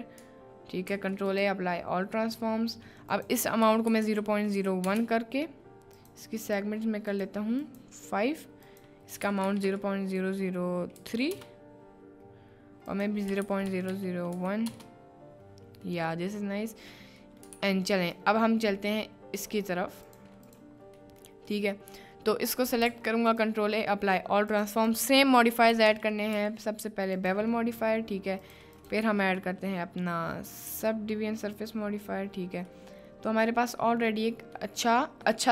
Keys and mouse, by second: 0.9 ctrl+a, 3.3-5.0 drag, 5.9 click, 6.5 click, 7.1 click, 7.6 click, 8.7-11.4 drag, 9.6 0, 13.0-14.8 drag, 13.9 0, 16.0 middle click, 17.3 middle click, 17.6 ctrl+s, 18.0 click, 20.1-20.5 drag, 21.1 middle drag, 21.6-22.0 middle drag, 22.7 middle click, 23.0 ctrl+a, 24.5-31.8 drag, 32.8-33.3 middle drag, 33.3 drag, 33.5-34.1 middle drag, 34.7 middle click, 35.3-35.5 shift+middle drag.